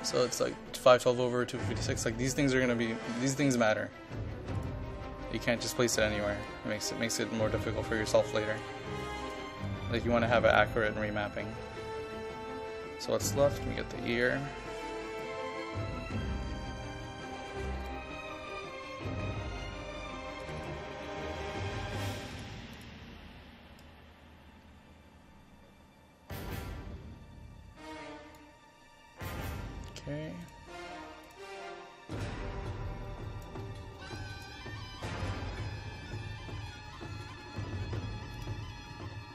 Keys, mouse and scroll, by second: 33.7-39.3 drag.